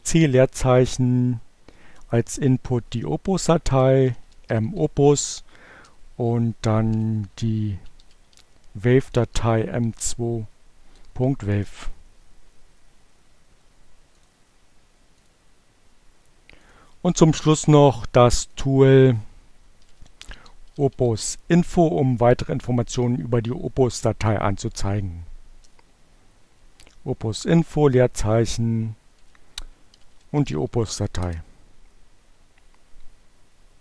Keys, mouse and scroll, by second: 0.2-1.3 typing, 2.7-3.6 typing, 5.3-7.4 typing, 8.0 Return, 13.1 click, 14.7 click, 15.9 click, 18.2 click, 18.5-20.6 typing, 23.5 space, 26.1 m, 28.2-29.6 typing.